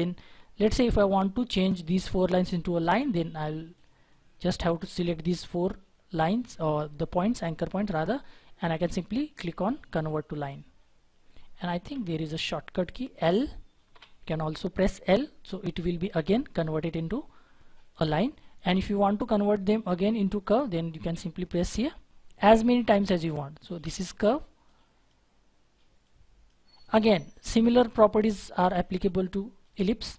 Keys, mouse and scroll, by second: 4.1 double click, 12.0 ctrl+z, 13.9 l, 27.2-28.4 scroll down 1.